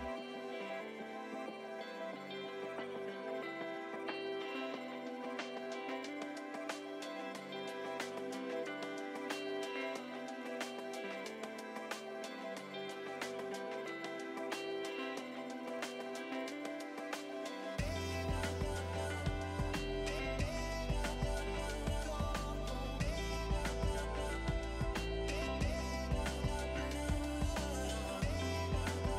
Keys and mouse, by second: 2.2 click, 3.3 click, 4.8 click, 6.1 click, 6.8 ctrl+shift+x, 6.9 click, 8.9 click, 9.4 KP_4, 9.6 Return, 10.4 click, 11.7 ctrl+shift+x, 11.9 click, 14.7 click, 15.9 ctrl+shift+x, 16.0 click, 17.3 click, 18.1 click, 20.1 ctrl+x, 20.3 click, 22.9 click, 24.7 x, 24.9 click, 27.2 click, 28.1 click, 28.9 Delete.